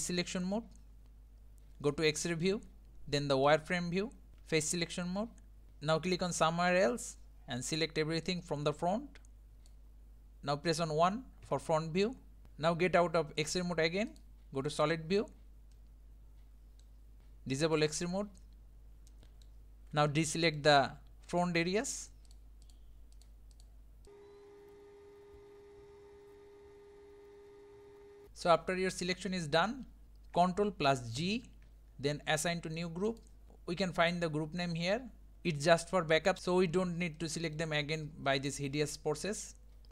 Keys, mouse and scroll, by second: 2.0-3.6 drag, 4.3 1, 4.4 3, 6.8 click, 9.7 click, 11.5 KP_1, 12.5-14.2 shift+middle drag, 14.2-14.8 drag, 15.7-17.2 middle drag, 17.2-18.5 drag, 18.5-19.1 scroll up 2, 19.1-21.4 shift+middle drag, 21.4 shift+click, 21.9 shift+click, 24.1 middle click, 24.4 shift+click, 24.5 shift+click, 24.6 shift+click, 24.6 middle click, 24.7 shift+click, 25.0 shift+click, 25.1 shift+click, 25.2 shift+middle click, 25.6-26.0 shift+click, 25.7 shift+click, 25.8 shift+click, 25.8 shift+click, 26.3 middle drag, 26.8-27.3 middle drag, 27.9 scroll up 1, 27.9 shift+middle click, 28.1 shift+click, 28.2-29.5 middle drag, 29.5 scroll down 2, 30.1 scroll down 2, 33.2 ctrl+g, 36.4-39.9 middle drag.